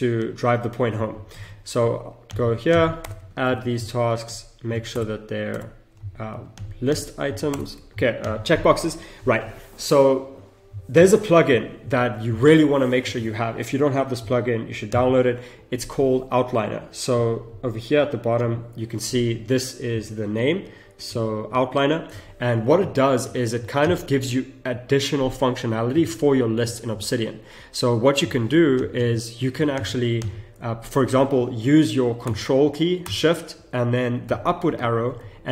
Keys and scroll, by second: 1.3 ctrl+c, 3.1 Return, 3.5 ctrl+v, 4.9 ctrl+Return, 7.5 ctrl+Return, 34.7 ctrl+shift+Up, 35.0 ctrl+shift+Up, 35.2 ctrl+shift+Up.